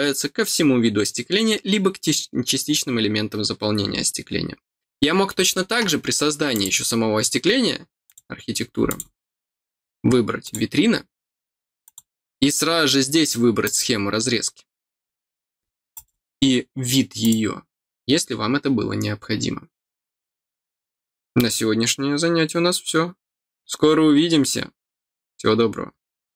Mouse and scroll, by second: 6.5 click, 8.0 click, 8.8 click, 10.4 click, 11.8 click, 13.6 click, 15.9 click, 17.2 click.